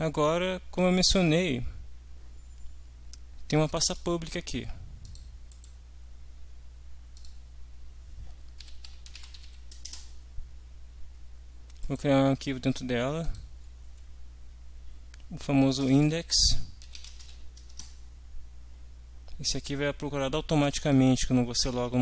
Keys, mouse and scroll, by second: 3.7 click, 5.0 click, 5.5 right click, 7.2 click, 8.4-9.9 typing, 11.8 right click, 13.2 click, 15.4-17.7 typing, 17.8 Return, 20.6 click.